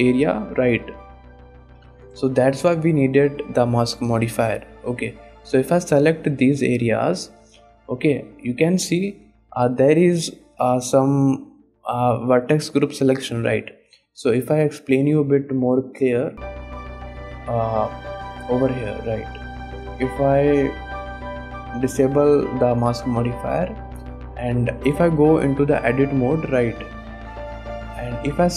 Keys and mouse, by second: 1.9 KP_1, 2.6 shift+click, 4.0 click, 4.7 shift+click, 6.0 shift+click, 6.5 shift+click, 8.4 shift+click, 9.1 shift+click, 9.8 shift+click, 13.9 click, 14.5 middle drag, 15.0 shift+middle click, 16.4 click, 16.9 click, 18.4 click, 18.9 middle click, 20.3 click, 21.5 click, 23.6 click, 24.1 middle click, 25.0 Tab, 25.6 alt+a, 26.0 click, 26.0 middle click, 26.9 click, 27.8 shift+click.